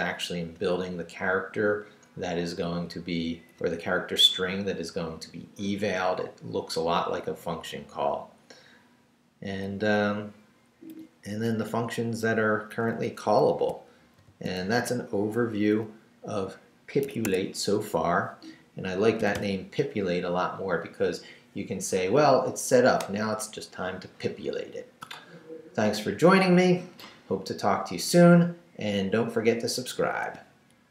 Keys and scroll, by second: 7.6 Down, 9.9 Down, 11.7 Up, 13.4 Down, 14.2 shift+v, 14.6 shift+Down, 17.0 Escape, 19.2 g.